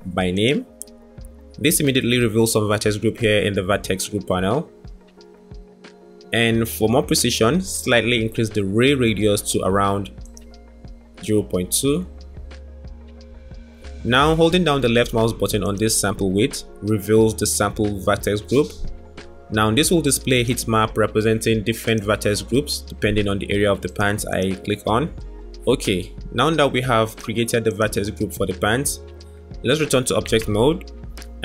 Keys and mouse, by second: 10.1 click, 11.7 click, 15.2-19.1 drag, 20.5 click, 22.0 click, 23.8 click, 24.7 click, 27.6-30.2 drag, 30.2 Tab.